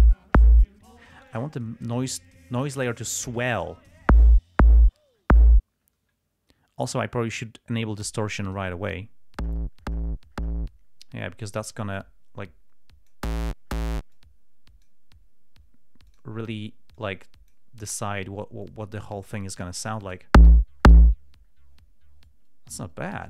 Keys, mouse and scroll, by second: 1.6-2.5 drag, 8.8 click, 12.3-13.6 drag, 14.4 click, 16.4 click, 17.3-18.0 drag, 18.9-20.6 drag.